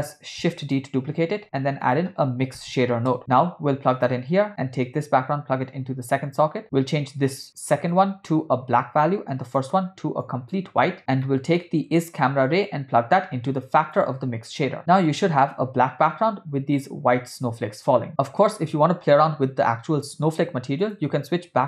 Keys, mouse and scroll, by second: 1.3 shift+a, 4.8-6.3 drag, 6.9 click, 9.5 click, 11.3 middle click, 12.7-14.2 drag, 14.8 space, 15.9 space, 20.8-21.6 drag.